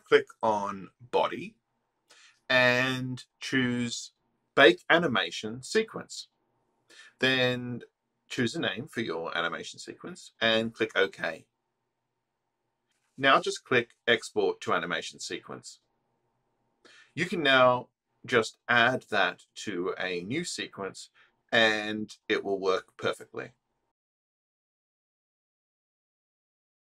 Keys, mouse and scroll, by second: 7.8 click, 10.0 click, 11.3 click, 16.8 click, 19.6 click.